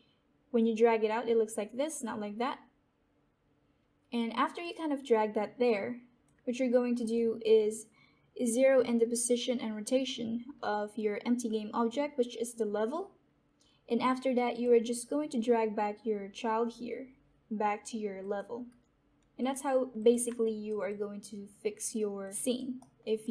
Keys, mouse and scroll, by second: 14.4 click, 14.9 scroll down 1, 16.8-17.1 scroll up 1, 19.2 click, 20.4 alt+right click, 20.8-22.3 alt+drag, 22.3 alt+right click, 22.7 alt+middle click, 23.2-23.3 alt+drag.